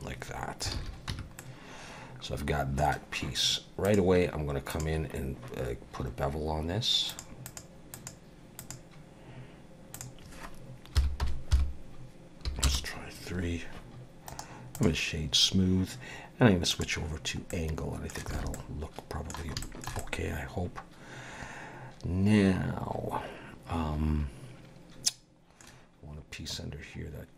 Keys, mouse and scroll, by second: 0.7 alt+a, 1.1 Tab, 1.4 middle click, 3.9 click, 7.1 click, 7.4 click, 7.9 click, 8.7 click, 9.9 click, 14.3 right click, 16.7 click, 17.5 middle click, 18.3 alt+a, 18.5 middle click, 19.6 shift+middle click, 20.0 middle click.